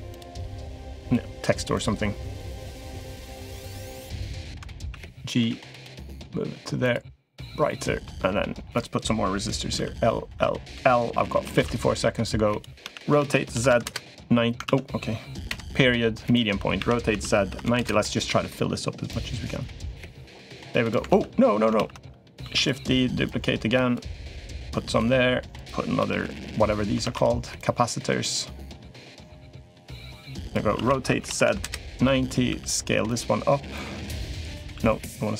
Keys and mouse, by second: 0.2 shift+click, 0.8 shift+click, 1.5 shift+click, 2.7 shift+click, 3.1 shift+click, 3.6 shift+click, 4.6 a, 5.2 g, 7.2 click, 7.4 middle click, 8.5 click, 9.5 l, 10.1 l, 10.5 l, 11.4 shift+d, 12.0 click, 12.6 r, 14.4 ctrl+z, 17.4 r, 18.9 click, 20.2 click, 20.9 ctrl+z, 21.5 ctrl+z, 22.2 shift+d, 23.0 click, 24.3 click, 25.3 click, 25.8 l, 26.8 shift+d, 27.4 click, 28.8 click, 29.8 click, 30.5 r, 32.2 s, 33.5 click, 34.5 s.